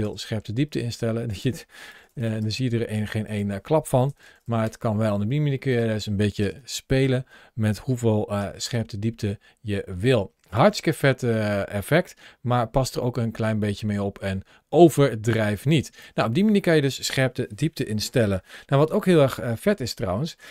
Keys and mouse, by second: 1.1-2.2 drag, 1.9 KP_0, 3.0-4.5 drag, 4.1 KP_0, 5.5-8.4 drag, 6.4 KP_0, 9.8 click, 10.8-15.8 drag, 17.6-19.7 middle drag.